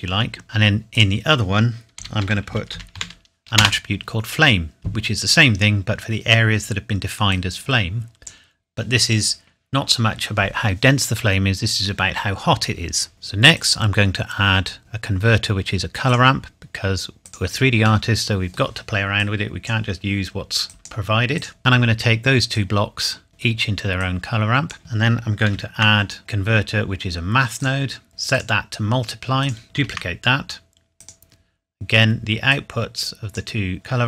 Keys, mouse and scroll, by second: 0.4 middle click, 0.9 click, 2.0-2.9 typing, 3.6 Return, 7.3 click, 13.1 click, 16.1 click, 18.1 middle click, 19.2 click, 25.5 shift+a, 27.6 click, 28.3 click, 29.8 shift+d, 31.0 click.